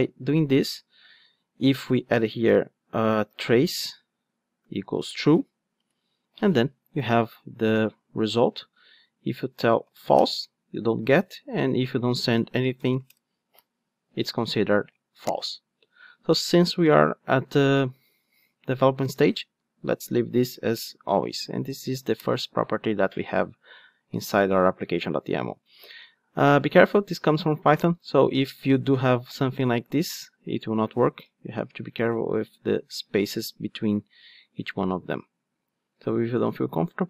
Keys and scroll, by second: 20.8 Return, 31.3 Tab.